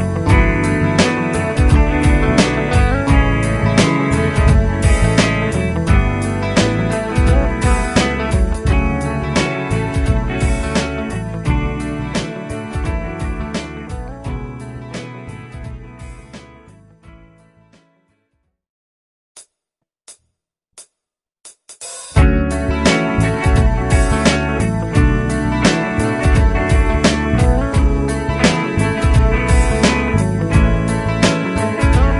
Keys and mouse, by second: 9.8 right click, 16.7 F12, 26.1 F2.